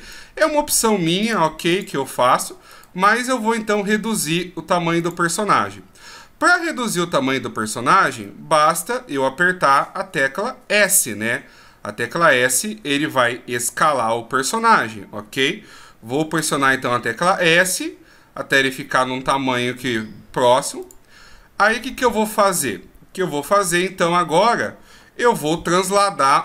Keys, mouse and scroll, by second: 1.2 click, 2.7 right click, 5.0 click, 6.0 scroll down 1, 8.2 middle click, 12.0 scroll down 2, 13.6-14.1 shift+scroll down 4, 15.7-16.0 shift+scroll down 2, 16.0 s, 21.8-23.3 scroll up 1, 23.3 scroll up 1, 23.3 KP_1, 26.3 shift+scroll up 5.